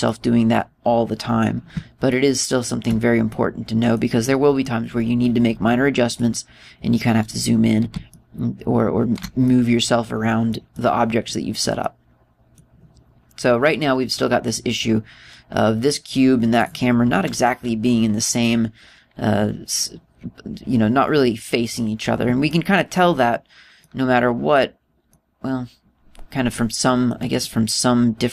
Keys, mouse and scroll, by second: 0.3 middle click, 1.6-1.9 scroll down 2, 2.7 shift+middle click, 3.9 middle click, 4.8 middle click, 5.8-6.7 scroll up 6, 6.7 right click, 7.4-8.0 scroll down 6, 8.7 shift+middle click, 10.0 middle click, 11.3 middle click, 12.4 middle click, 14.3 right click, 16.4 right click, 17.1 right click, 23.1 middle click, 24.4 middle click, 25.7 middle click, 28.0 middle click.